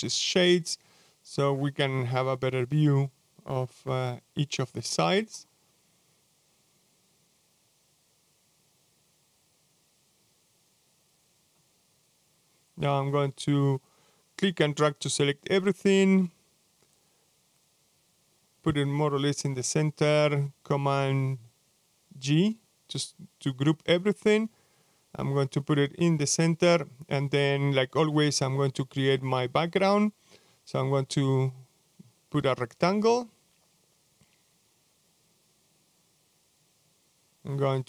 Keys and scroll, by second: 22.6 super+g.